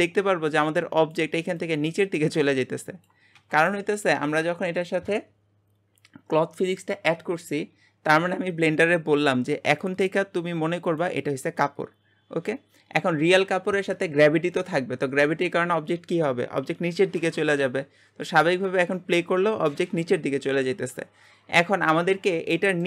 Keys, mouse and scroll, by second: 0.0 space, 4.0-7.1 scroll up 2, 9.8-11.4 drag, 11.4-12.0 scroll up 10, 22.2 scroll down 3, 22.5-22.8 middle drag.